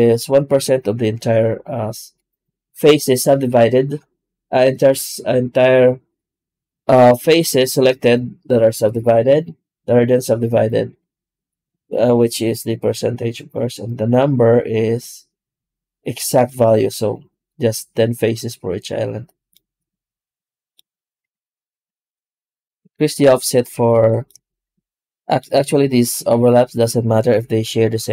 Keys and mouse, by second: 21.1 F9, 23.9 shift+middle drag.